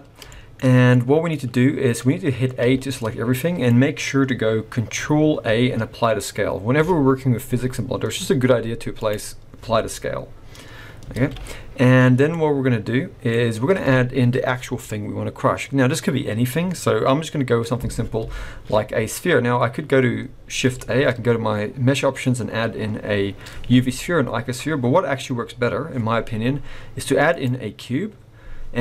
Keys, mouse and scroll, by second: 0.5 shift+middle click, 0.9 middle click, 1.6-2.4 scroll down 2, 2.6 a, 2.9 middle click, 3.7-4.0 scroll up 1, 5.4 ctrl+a, 11.1 alt+a, 11.7-12.3 scroll up 1, 12.3 middle click, 12.3 scroll up 2, 13.3 scroll down 2, 17.4-18.1 scroll up 2, 18.4 shift+a, 20.8 shift+a.